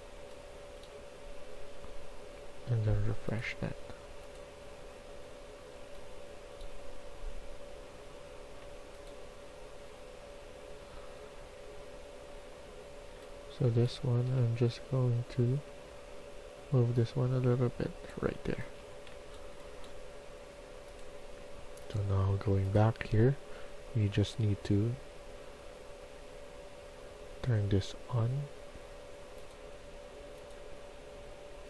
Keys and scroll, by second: 0.6-1.4 typing, 13.0-14.3 typing, 15.8 Tab, 17.6-20.0 typing, 18.6 Escape.